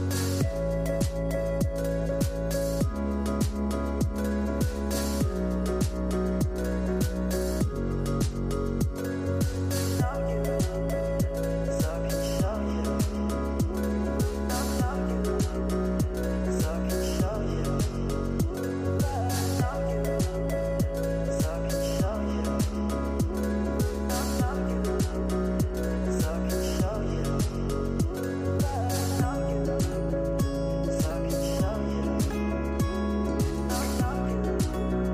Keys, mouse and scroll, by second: 1.8 click, 2.5 click, 3.1-5.2 scroll down 3, 5.8-6.4 middle drag, 6.4 scroll down 5, 6.7 middle click, 7.2 shift+a, 9.8 s, 13.0 click, 14.1-18.0 drag, 18.1-19.6 drag, 20.1-21.8 drag, 22.3-22.8 scroll up 3, 22.8 middle click, 24.5 F3, 26.0 l.